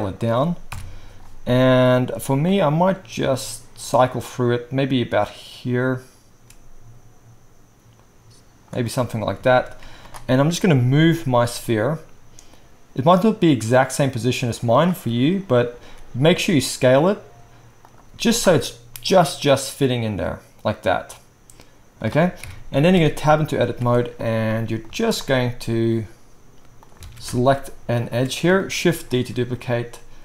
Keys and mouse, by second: 0.6 KP_1, 2.4-6.5 middle drag, 9.8 z, 10.9 g, 15.7 s, 18.0-23.3 right drag, 18.0 z, 22.4 KP_1, 22.9 Tab, 23.3 shift+click, 23.5-25.1 right drag, 23.7 z, 24.8 z, 25.1 click, 25.4-28.0 right drag, 26.8-29.6 alt+drag, 26.8-28.0 alt+middle drag, 27.1 alt+a, 29.1 shift+d, 29.6-30.2 middle drag.